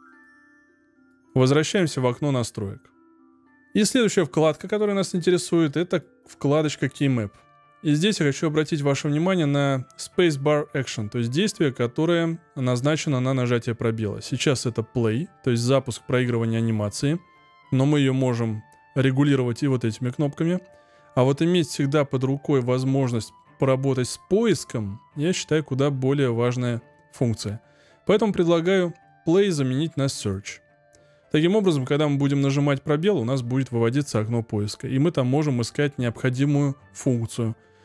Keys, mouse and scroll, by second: 0.0 click.